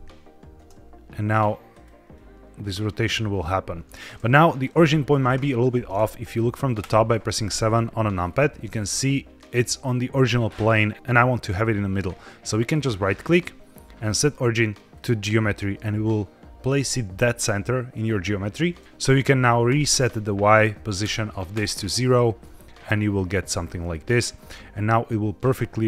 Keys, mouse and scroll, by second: 0.5 space, 1.2 drag, 1.7-4.5 drag, 6.7 KP_7, 7.6-9.8 scroll up 5, 12.6-15.0 right drag, 19.6-21.4 drag, 22.3-22.8 middle drag, 22.8-24.6 scroll down 4, 24.6-25.0 scroll down 1, 25.0-25.8 drag.